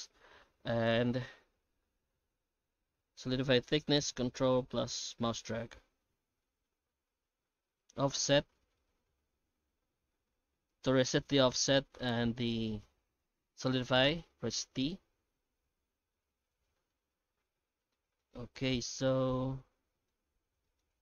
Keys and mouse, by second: 16.9-17.9 middle drag, 18.2 shift+middle click, 18.6-20.1 middle drag, 20.3 Tab, 20.6 shift+middle click.